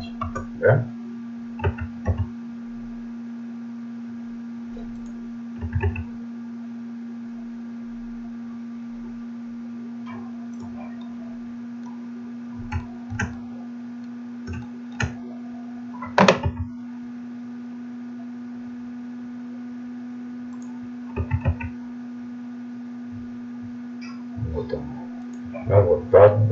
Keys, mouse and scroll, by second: 1.7 s, 5.6 s, 11.0-14.9 middle drag, 16.5 s, 21.2 s, 25.8-26.5 middle drag.